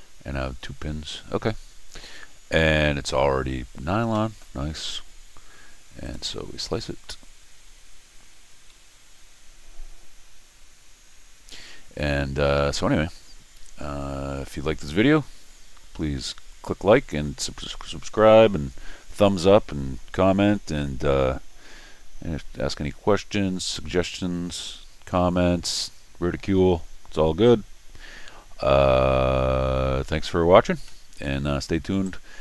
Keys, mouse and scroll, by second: 6.1 click, 30.9-32.0 middle drag, 32.2-32.4 right drag.